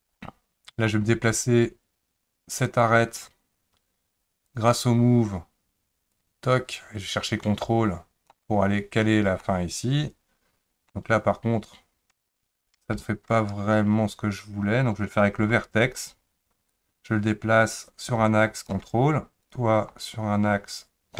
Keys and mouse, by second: 2.5 click, 4.5 click, 6.3-8.3 drag, 9.4-10.9 middle drag, 12.8 ctrl+z, 15.4 1, 16.7-18.7 drag, 19.4 click, 20.0-21.1 drag.